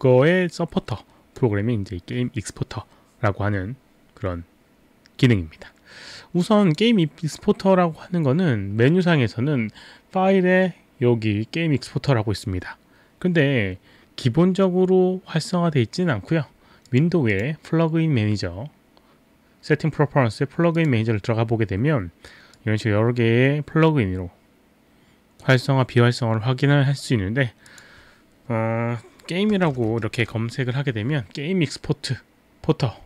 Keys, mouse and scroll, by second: 0.9 click, 6.5 click, 8.9 click, 16.9 click, 17.3 click, 20.8 click, 22.6 click, 27.7 click, 29.3-30.8 typing.